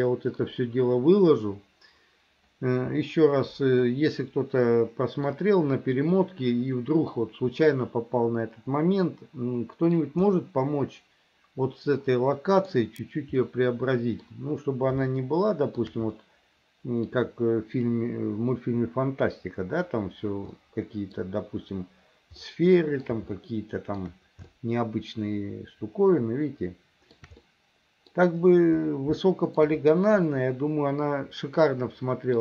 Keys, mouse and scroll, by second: 4.0-5.4 middle drag, 6.4 middle click, 9.0-10.1 middle drag, 10.4-12.8 middle drag, 13.5 middle click, 15.2 shift+middle click, 16.3 middle click, 20.6 middle click, 22.5 middle click, 23.4 shift+middle click, 24.5-27.3 shift+middle drag, 27.5 middle click, 29.3 shift+middle click, 30.4-32.4 middle drag.